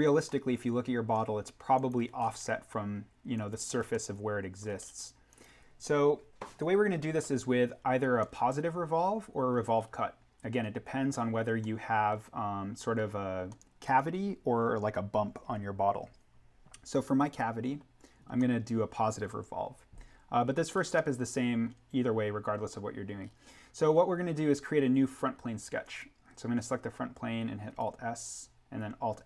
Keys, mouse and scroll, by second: 0.2 scroll down 1, 0.4 scroll, 1.7 click, 2.2-3.0 scroll up 1, 3.3 ctrl+click, 3.8-4.3 scroll up 1, 4.3 ctrl+middle click, 4.6-5.3 scroll down 1, 5.3 click, 7.7-8.2 scroll down 1, 8.2-9.8 middle drag, 9.8-10.3 scroll up 1, 11.6 middle click, 13.5-16.1 scroll, 18.3-20.7 scroll, 20.9-23.2 middle drag, 23.2-23.6 scroll up 1, 25.8 click, 27.6 alt+s.